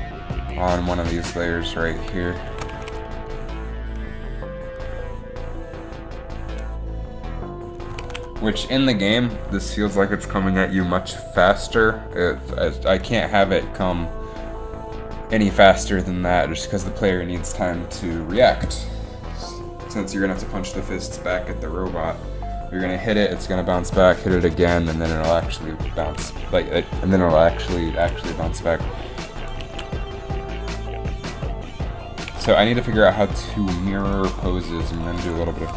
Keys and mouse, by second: 2.7 shift+Left, 2.8 alt+a, 8.2 alt+a, 11.0 alt+a, 13.5-15.4 drag, 29.5 click, 29.8 alt+a, 32.5 alt+a.